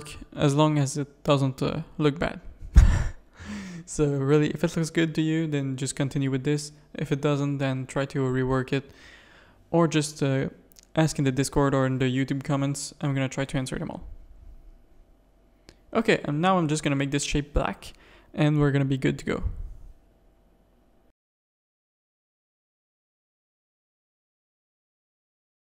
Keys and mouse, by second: 0.3 g, 2.4 shift+middle click, 3.5 click, 3.8 g, 5.9 Tab, 6.7 click, 7.1 Tab, 8.7 click, 9.1 g, 12.7 click, 13.7 Tab, 14.1 alt+a, 14.6 z, 16.5-16.9 middle drag, 16.9 z, 18.4-18.9 middle drag, 19.8-20.2 middle drag, 20.9 middle drag, 23.0 click, 24.9 click.